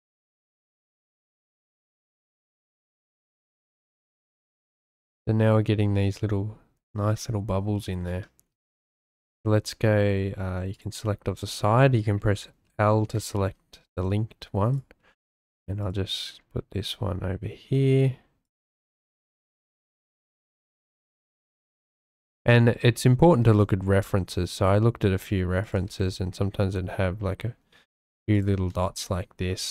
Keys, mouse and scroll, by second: 0.7 a, 1.4 g, 1.4 z, 2.3 shift+click, 10.7 click, 12.6 l, 14.0 shift+d, 14.7 click, 15.0 s, 15.8 click, 16.0 g, 18.7 shift+d, 19.3 s, 20.1 g, 20.5 click, 20.8 shift+d, 21.6 click, 22.2 shift+click, 23.5 shift+d, 26.0 shift+d, 28.3 shift+click, 28.8 shift+d, 29.6 click.